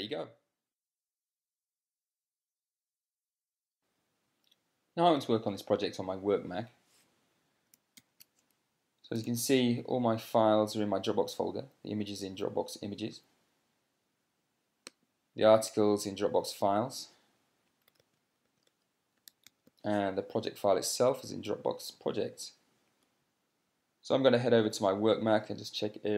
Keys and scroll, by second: 8.5 ctrl+p, 9.5 Down, 9.5 Down, 18.4 super+space, 19.1 super+space, 19.4-20.6 typing.